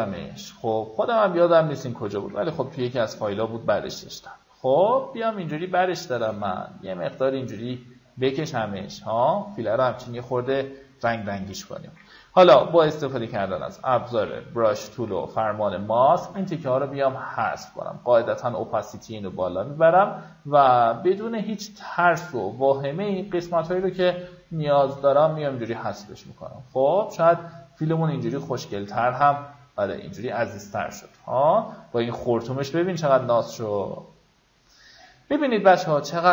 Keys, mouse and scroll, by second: 2.6 ctrl+t, 3.2-5.4 drag, 5.9-7.9 shift+drag, 11.1 click, 12.7 b, 13.3 alt+right click, 13.9 click, 15.0 click, 16.9-25.4 drag, 25.4-25.8 alt+scroll up 1, 26.5-30.7 drag, 30.9 alt+scroll down 1, 31.6 alt+scroll up 1, 34.2-36.3 drag.